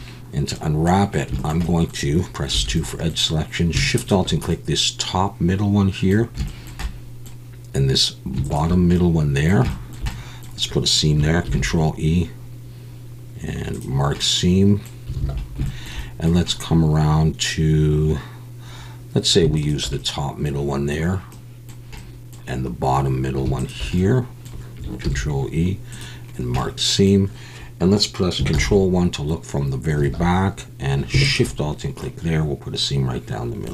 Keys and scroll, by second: 2.5 2, 11.4 ctrl+e, 15.2 alt+a, 25.0 ctrl+e, 28.5 ctrl+KP_1, 30.0 alt+a.